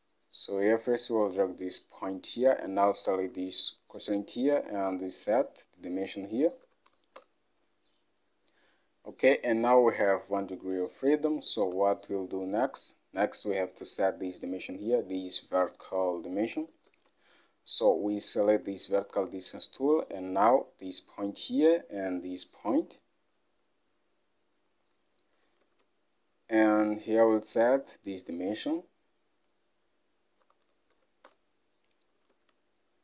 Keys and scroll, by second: 6.5 3, 6.7 0, 7.0 6, 7.3 Return, 11.6 alt+Tab, 25.7 alt+Tab, 30.5-31.0 typing, 31.3 Return, 32.4 alt+Tab.